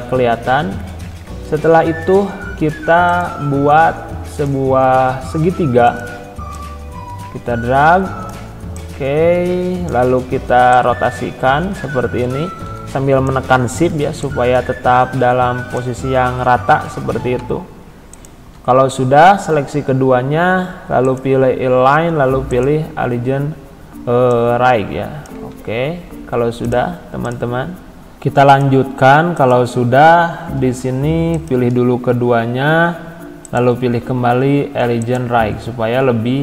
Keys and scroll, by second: 25.5 ctrl+z.